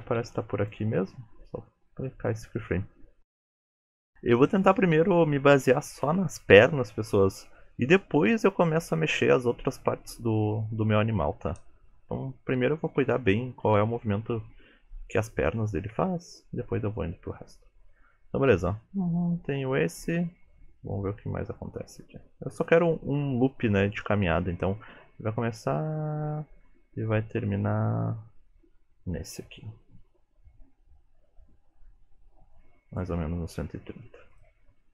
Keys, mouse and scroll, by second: 0.0 g, 2.0-3.0 scroll down 3, 3.0-5.5 scroll down 1, 10.6 shift+middle click, 11.6 KP_3, 12.2-12.7 scroll up 2, 12.7 shift+middle click, 15.0 shift+middle click, 15.9 shift+middle click, 18.9 click, 34.4 click.